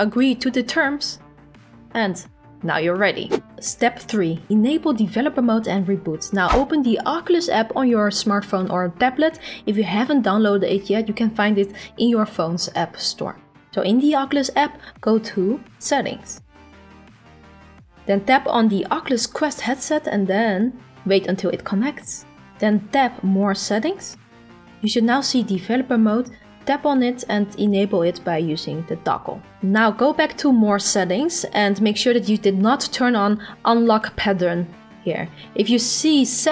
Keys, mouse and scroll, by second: 0.3 click.